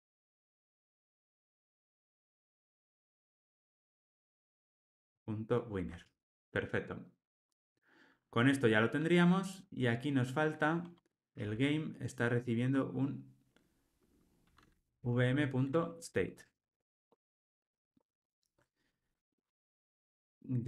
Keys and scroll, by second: 3.4 Return, 4.9 Tab, 6.0 alt+super+l, 6.2 ctrl+alt+o, 11.3 super+p, 15.7 Return, 16.4 alt+super+l.